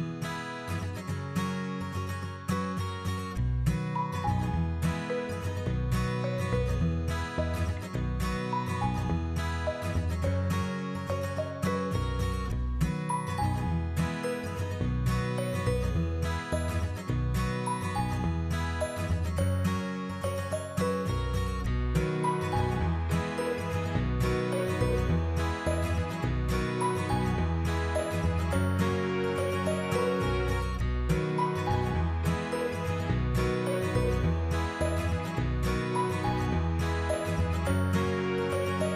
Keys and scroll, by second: 7.3 Tab, 9.1 ctrl+v, 24.0-26.0 typing, 37.8 2, 38.2 Return.